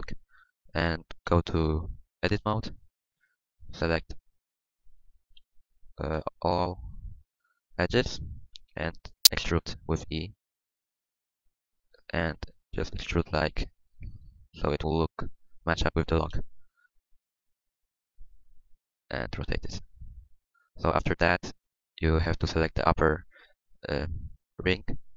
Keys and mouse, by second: 1.2 Tab, 5.3 KP_3, 6.1 KP_1, 8.5 KP_1, 10.0 e, 13.2 s, 14.7-16.3 middle drag, 16.3 KP_3, 16.7 KP_3, 18.4 KP_1, 18.8 r, 23.4-24.4 middle drag, 24.5 middle click.